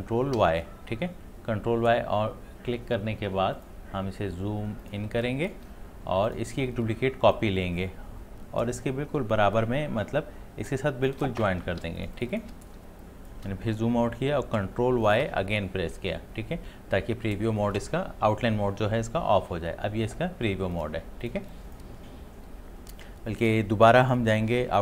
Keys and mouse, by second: 0.4 ctrl+y, 3.3 ctrl+space, 3.6 ctrl+click, 3.8 ctrl+space, 4.8 ctrl+click, 5.1 ctrl+space, 5.2 click, 6.3 click, 11.8 space, 12.0 ctrl+alt+click, 12.8 space, 13.0 click, 13.3 space, 15.1 ctrl+y, 20.7 ctrl+y, 21.0 space, 21.3 ctrl+alt+click.